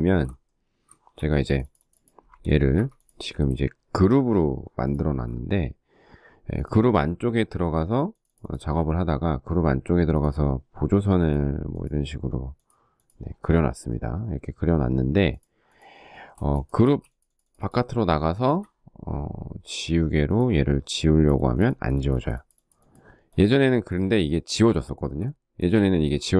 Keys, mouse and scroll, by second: 1.8 Escape, 15.8 space, 17.5 shift+middle click, 23.8 shift+middle click, 26.0 shift+middle click.